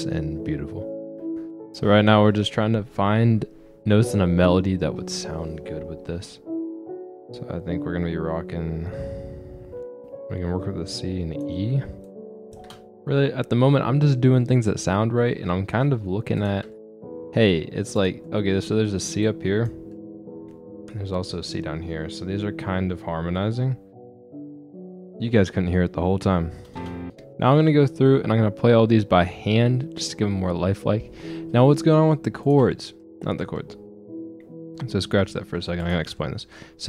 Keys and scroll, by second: 1.2 space, 12.6 space, 27.1 space.